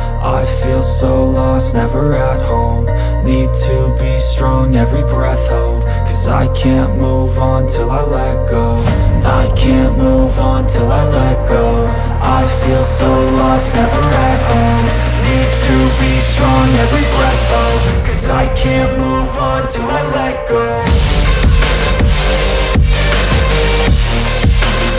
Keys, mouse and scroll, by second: 4.7 click, 7.6 z, 7.9 click, 9.2 space, 9.3 click, 16.3 click, 16.5 space, 16.7 click, 17.1 space, 18.2 click, 19.1 space, 19.2 click, 19.8 space, 19.9 click, 20.5 space, 20.7 click, 21.1 space, 22.7 click.